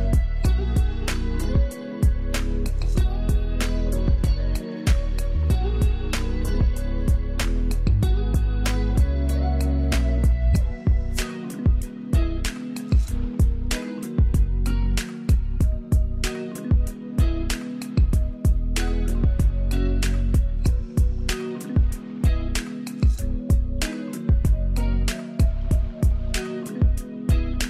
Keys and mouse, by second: 0.5 ctrl+u, 3.6-8.0 drag, 8.0 ctrl+z, 10.4-13.7 drag, 17.3-20.8 ctrl+drag, 25.3 Up.